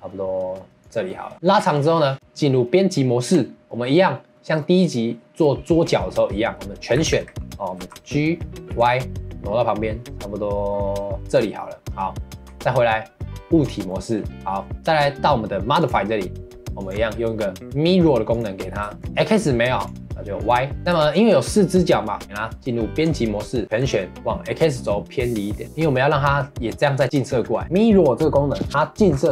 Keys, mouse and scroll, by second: 1.1 middle click, 1.3 ctrl+s, 1.4 middle click, 2.1 Tab, 12.4 Tab, 13.9-15.8 middle drag, 15.8 click, 16.7-18.9 drag, 18.9 shift+middle click, 19.8 click, 20.4 click, 20.8-22.2 shift+middle drag, 22.2 Tab, 23.7 a, 27.6-28.7 middle drag, 28.7-29.1 scroll down 1, 29.1 scroll up 2.